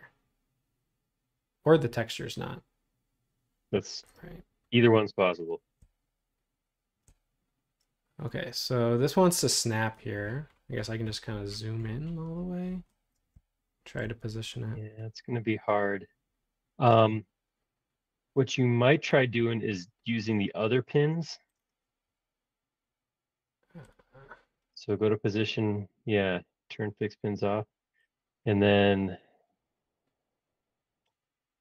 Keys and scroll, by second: 19.4 ↺.